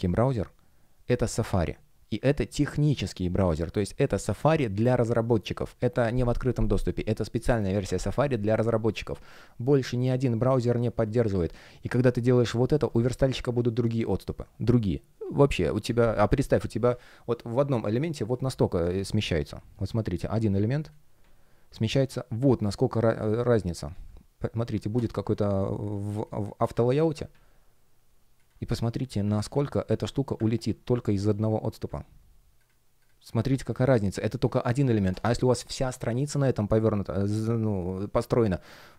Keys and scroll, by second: 10.5 space, 19.1 super+\, 25.2 shift+a, 26.0 space, 29.8 Down.